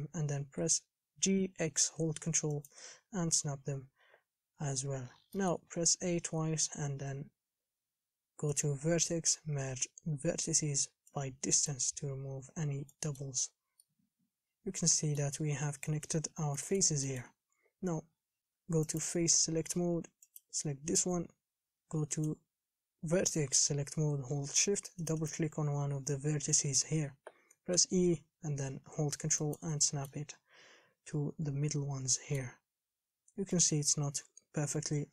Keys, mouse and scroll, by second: 0.5 g, 3.3-3.7 scroll down 1, 3.7 scroll up 2, 3.9-4.4 scroll down 9, 4.9-5.6 scroll down 4, 5.6 shift+middle click, 5.9 scroll down 4, 6.2 a, 6.3 a, 11.9 click, 12.7-13.1 scroll up 4, 13.1 middle click, 13.6-14.0 scroll down 4, 14.0-15.8 middle drag, 15.8-16.2 scroll down 6, 16.2 KP_7, 16.5 scroll up 4, 16.8 middle click, 17.5 a, 17.8-19.0 scroll up 3, 19.0-20.6 drag, 22.3-25.3 drag, 25.4 shift+click, 28.0 e, 30.0-31.5 shift+middle drag, 31.5 KP_7, 32.1 scroll up 1, 32.4 shift+middle click, 33.3 scroll up 4, 33.8-35.1 shift+middle drag.